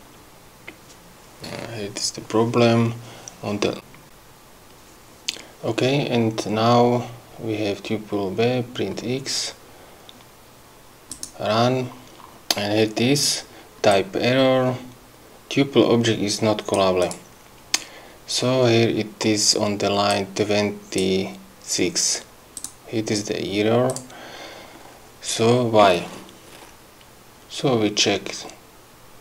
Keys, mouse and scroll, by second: 1.4 scroll up 2, 11.1 click, 13.9-16.9 drag, 17.0 click, 20.1 click, 22.6 click, 23.9 click.